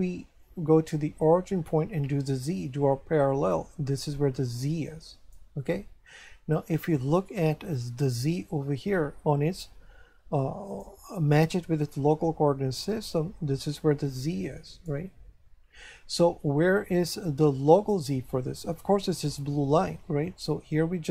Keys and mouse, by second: 1.2 click, 7.7 click, 12.9 click, 20.4 click.